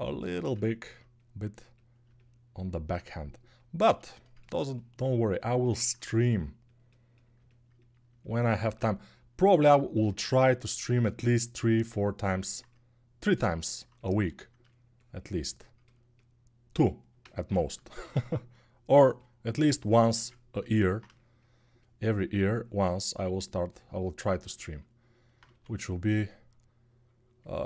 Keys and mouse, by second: 17.7 shift+r, 20.0 ctrl+r, 25.2 1.